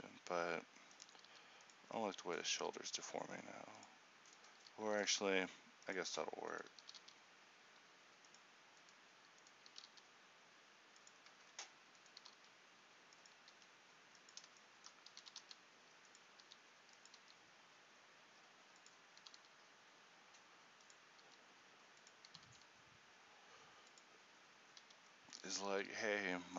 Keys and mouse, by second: 1.4 r, 2.7 r, 5.2 r, 5.2 g, 6.9 r, 9.8 r, 13.6 r, 13.6 g, 15.3 r, 16.6 r, 17.3 g, 19.4 r, 21.4 r.